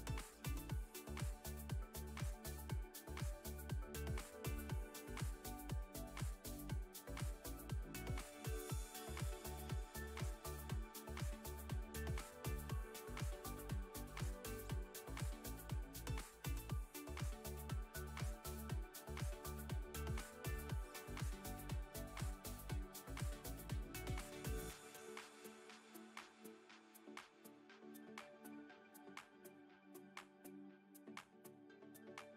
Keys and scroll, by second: 0.7 KP_1, 5.0 Tab, 5.7 Tab, 15.1 Tab, 19.9 ctrl+r, 29.1 ctrl+r, 31.2 Tab.